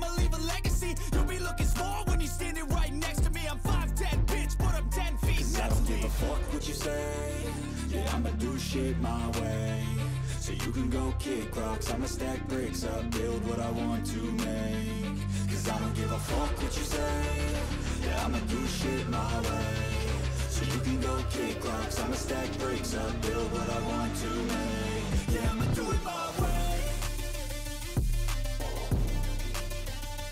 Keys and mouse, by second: 5.3 right click, 6.5 right click, 7.5 right click, 7.9 right click, 9.3 right click, 11.8 right click, 12.6 right click, 14.5 right click, 16.7 right click, 17.4 right click, 18.1 right click, 21.0 right click, 22.3 right click, 25.1 right click, 25.8 right click, 26.1 right click.